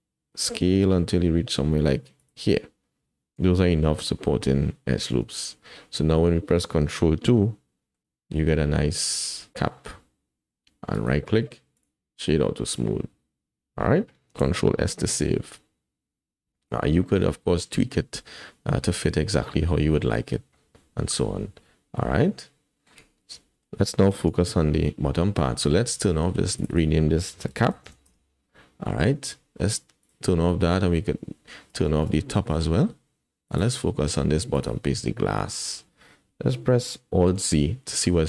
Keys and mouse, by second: 5.1 Tab, 7.2 ctrl+2, 7.8 click, 8.6-10.0 middle drag, 8.8 click, 10.0 click, 10.1 middle click, 10.2-10.6 drag, 10.9 click, 14.4 ctrl+s, 15.3 KP_1, 16.5 shift+click, 20.0-22.9 middle drag, 23.6 shift+middle click, 24.3 KP_1, 25.2 shift+middle click, 26.6 click, 26.7-28.1 drag, 30.0 click, 31.9 shift+click, 33.5 click, 34.5 click, 35.6 shift+drag, 37.5 alt+z.